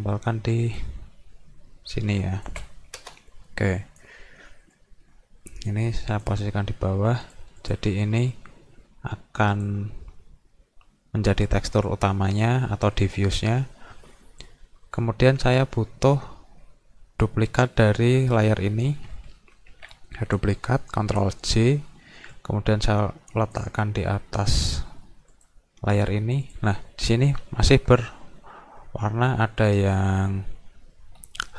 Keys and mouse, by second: 2.2 shift+click, 3.5 click, 4.8-6.3 drag, 7.2 click, 7.6 click, 9.5 click, 22.3-23.6 drag, 24.5 click, 25.4 click, 26.5 click.